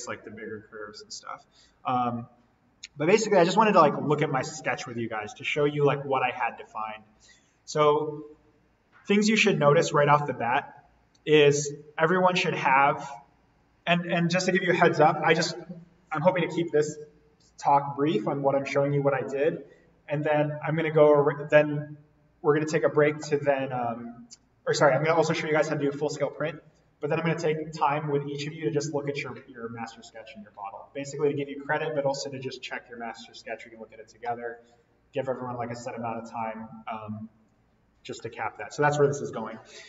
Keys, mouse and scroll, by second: 1.5-2.1 scroll up 1, 2.8 scroll down 1, 6.6-7.2 scroll down 1, 8.1-8.5 scroll up 1, 10.1-10.8 scroll down 1, 10.8-11.2 scroll up 1, 11.2-12.6 scroll down 1, 12.6-16.1 drag, 39.7-39.8 scroll up 1.